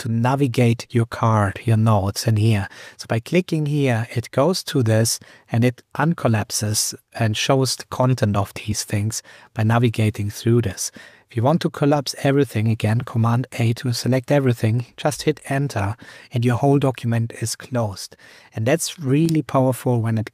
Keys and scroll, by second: 13.1 super+a, 15.1 super+Return.